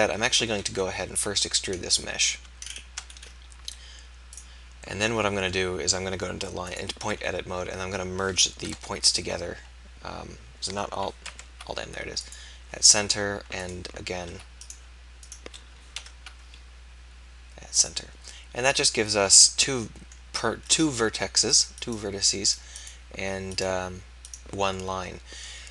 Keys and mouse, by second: 0.7 KP_1, 1.3 e, 8.7 alt+,, 11.4 alt+m, 16.1 alt+m, 21.6-25.7 middle drag.